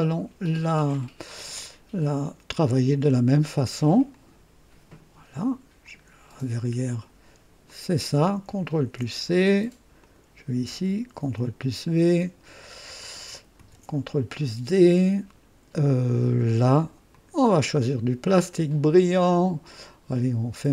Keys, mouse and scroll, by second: 4.0 click, 5.9-6.3 scroll down 1, 7.6 click, 8.8 ctrl+c, 9.9 click, 11.1 v, 12.4 click, 13.5 ctrl+d, 17.0 click, 18.6 click.